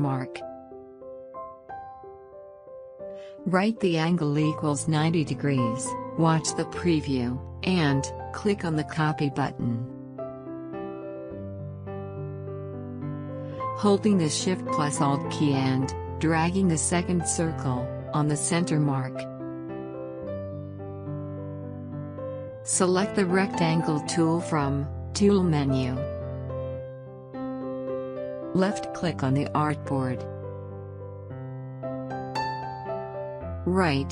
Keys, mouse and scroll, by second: 0.9 click, 1.0-4.4 alt+drag, 7.1 click, 12.6 click, 15.8 ctrl+shift+z, 17.7-25.4 shift+drag, 27.0 right click, 28.4 click, 28.4 click, 31.2-34.1 drag.